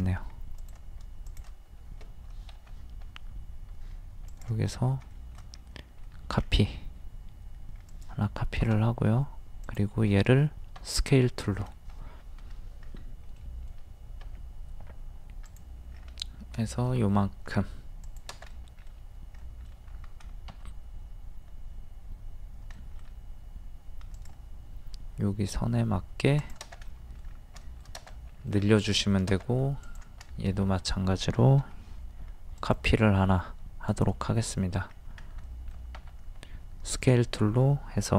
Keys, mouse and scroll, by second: 0.2-0.6 scroll up 1, 0.6 click, 1.3 shift+click, 2.5 m, 4.3 click, 4.7 scroll down 1, 4.9 scroll up 1, 5.2 shift+middle click, 6.3-7.2 scroll up 1, 7.9 click, 10.8 shift+s, 11.5 shift+middle click, 12.0-12.8 scroll up 1, 13.4 middle click, 15.5 click, 16.0-16.5 scroll down 1, 18.0 click, 18.5 middle click, 19.9-20.3 scroll up 1, 20.5 scroll up 1, 22.8 middle click, 24.2 click, 26.9 middle click, 27.3 scroll down 1, 28.5-28.9 scroll down 1, 28.9 middle click, 29.8 click, 30.3-31.4 shift+middle drag, 31.6 m, 32.6 ctrl+click, 34.9 scroll up 1, 35.5 middle click, 36.9 click.